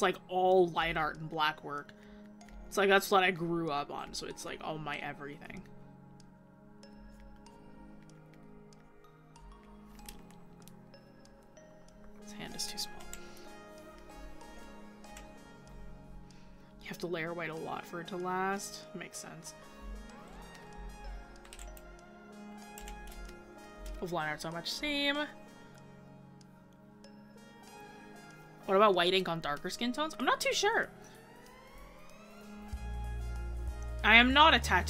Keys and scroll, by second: 28.7 scroll up 1, 29.4 scroll.